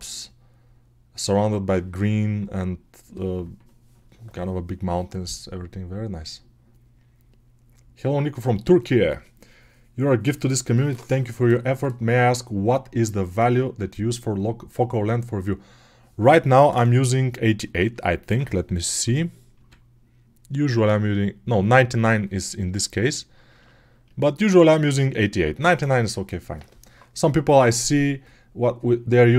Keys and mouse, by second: 17.9-20.5 ctrl+alt+right drag, 18.9 n, 19.4 n, 20.5-22.0 middle drag, 21.7 n, 22.0-29.3 right drag.